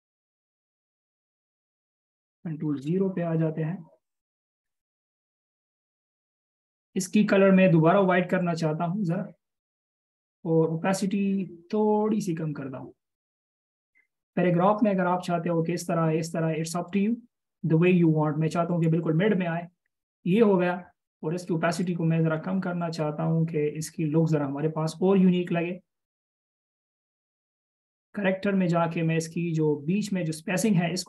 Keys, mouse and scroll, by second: 3.0 ctrl+KP_0, 5.8 double click.